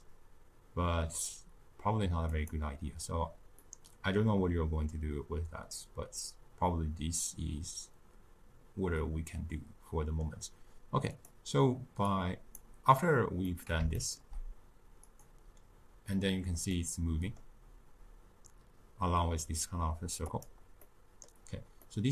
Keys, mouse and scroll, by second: 0.0 click, 2.5-3.6 drag, 3.6-6.8 middle drag, 11.0-13.4 drag, 13.4-15.1 middle drag, 15.1-16.7 drag, 16.7-19.8 middle drag, 20.3-20.7 drag, 20.7-22.1 middle drag.